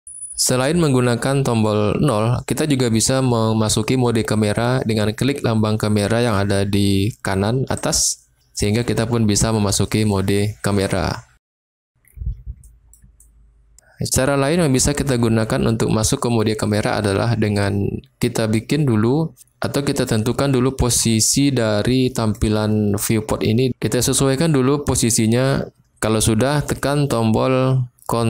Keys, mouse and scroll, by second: 7.8 click, 9.8 click, 10.9 middle click, 12.6 middle drag, 13.1-13.7 shift+middle drag, 17.6-22.4 middle drag.